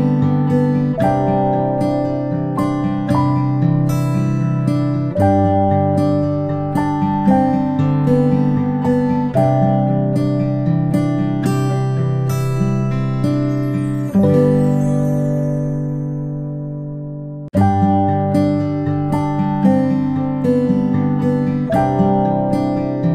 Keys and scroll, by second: 0.8 space, 3.5 space, 3.8 space, 21.9 space, 22.1 space.